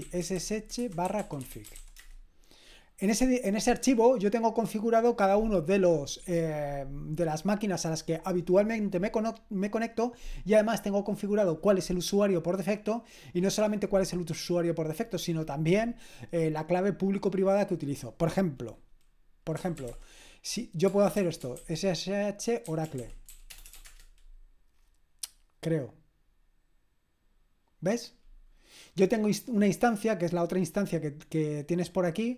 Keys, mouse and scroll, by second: 0.0-2.3 typing, 19.3-24.2 typing.